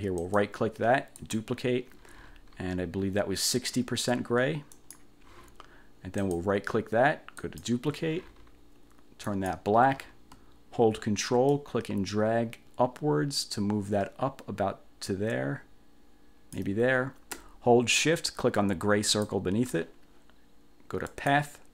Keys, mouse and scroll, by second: 0.3 right click, 1.3 click, 4.9 click, 6.3 click, 7.5 click, 9.4 click, 11.7-16.9 ctrl+drag, 19.2 shift+click, 21.2 click.